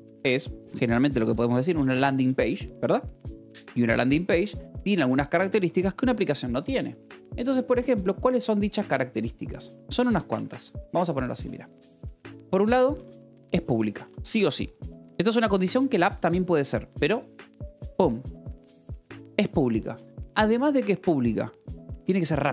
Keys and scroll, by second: 0.9-4.8 typing, 3.0 Escape, 7.5 e, 7.8 space, 10.1 BackSpace, 11.2 Return, 11.8-13.6 typing, 14.1 Escape, 15.0 o, 19.9 space, 21.9-22.5 typing.